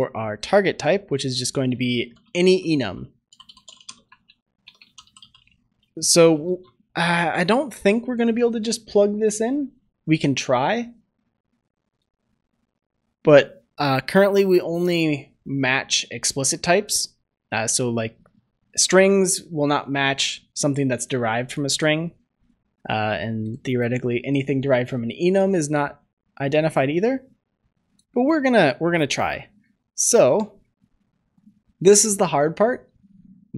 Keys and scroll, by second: 6.3 ctrl+s.